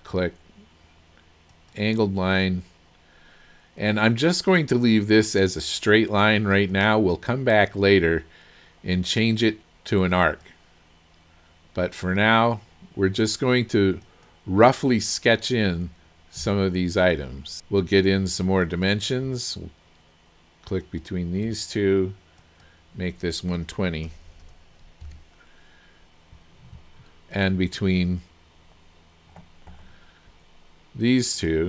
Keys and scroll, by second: 16.4 Escape, 17.6 Escape, 24.1 KP_1, 24.3 KP_2, 24.5 KP_0, 25.4 Return.